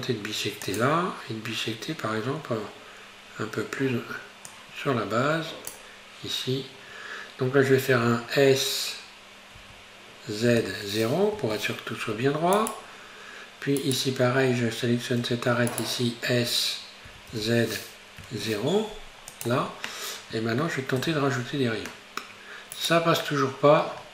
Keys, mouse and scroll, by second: 6.5-8.7 scroll up 2, 8.7-9.6 scroll down 1, 9.6 s, 13.8 right click, 15.3 2, 15.7 right click, 17.1 s, 21.0 ctrl+r, 23.3 middle click, 24.0-24.1 scroll down 5.